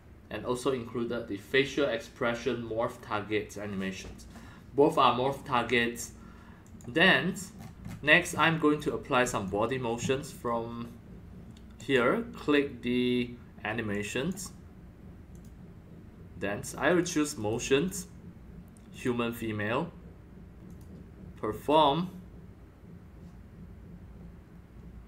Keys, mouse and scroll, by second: 2.0-4.8 drag, 6.6 click, 6.8-7.6 drag, 7.5-8.0 scroll down 14, 8.3 scroll up 7, 8.5-9.7 typing, 8.8-9.4 drag, 9.5 click, 11.8 click, 13.9-14.3 drag, 15.3 click, 16.9 click, 17.3 click, 18.9 click, 20.7 click, 21.6 click.